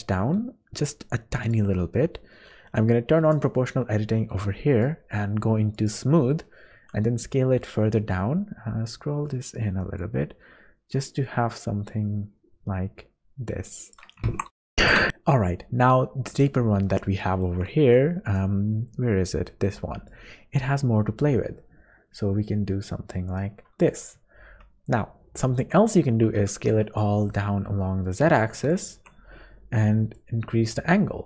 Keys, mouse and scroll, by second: 3.2 o, 4.7 click, 6.7 s, 14.3 Tab, 14.9 middle click, 16.3 click, 17.1 shift+middle click, 17.9 scroll down 2, 19.3 scroll down 1, 20.1 click, 23.9 click, 24.3-24.8 scroll down 3, 24.8-25.6 scroll up 2, 25.6 Tab, 26.1 a, 26.4 s, 28.9 Tab, 30.1 click.